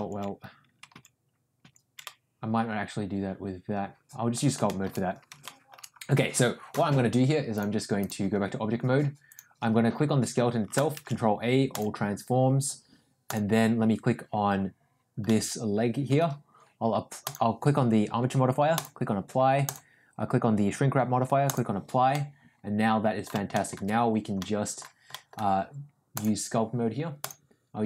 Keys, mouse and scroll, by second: 0.4 ctrl+z, 1.9 ctrl+z, 2.0-4.3 middle drag, 4.6 middle click, 5.4 shift+middle click, 7.6-8.1 drag, 9.2 click, 10.9 ctrl+a, 15.2-16.1 middle drag, 17.2-19.0 drag, 19.8-21.7 drag, 22.0-23.2 middle drag, 23.4 shift+middle click, 24.3 middle click, 25.0 middle click, 26.2-27.2 drag.